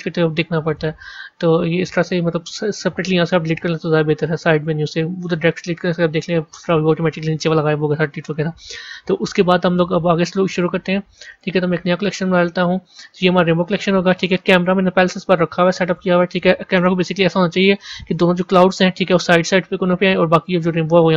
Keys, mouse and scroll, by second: 0.1 click, 0.5-3.2 right drag, 3.2 scroll up 3, 3.9-5.9 scroll up 7, 6.0-8.7 middle drag, 8.7 KP_1, 10.4 click, 11.1-12.1 right drag, 12.1 click, 14.0-15.3 shift+middle drag, 15.3 scroll up 1, 15.8 click, 16.7 KP_0.